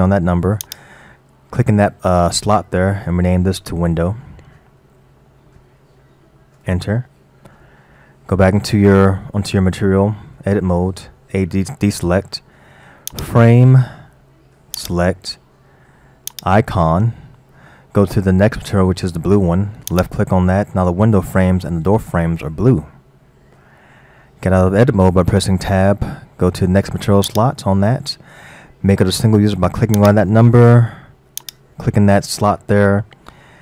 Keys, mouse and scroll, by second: 0.6 click, 10.3 Tab, 11.2 a, 13.1 click, 14.8-15.3 drag, 16.4 click, 21.3-25.5 middle drag, 25.5 Tab, 27.3 click, 30.0-30.7 drag, 31.4 click.